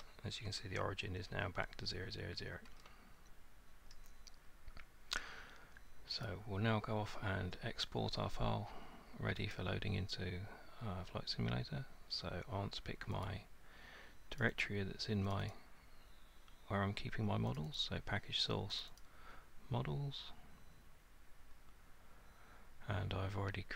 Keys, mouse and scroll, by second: 0.0 middle click, 0.6 middle click, 2.8 middle click, 3.9 middle click, 6.2 click, 9.5 click, 13.3 click, 14.4 click, 14.7 click, 15.3 click, 15.5 click, 17.6 click, 17.8 click, 18.8 click, 19.0 click.